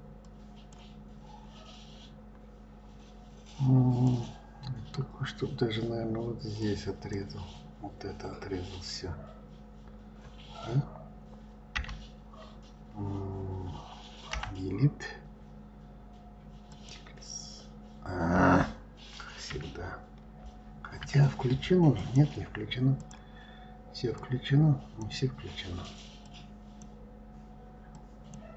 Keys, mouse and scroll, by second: 4.0 click, 6.6 click, 11.7 Delete, 14.3 Delete, 20.1 ctrl+z, 21.9 click, 23.0 click, 24.2 click, 26.2 click, 27.9 click.